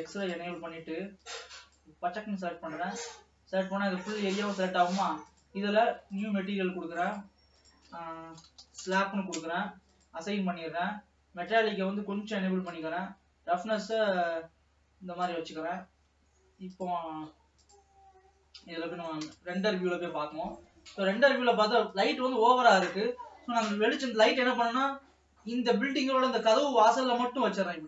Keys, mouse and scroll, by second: 0.3-1.8 drag, 2.7-4.5 middle drag, 4.5 scroll down 1, 5.5-11.3 drag, 11.3-11.7 scroll down 5, 11.7-15.6 drag, 15.6 scroll down 1, 17.2 click, 18.8 scroll down 2, 19.5 KP_0, 20.8 Tab, 20.9 scroll down 2, 21.7 ctrl+s, 22.2-24.4 drag, 24.4 g.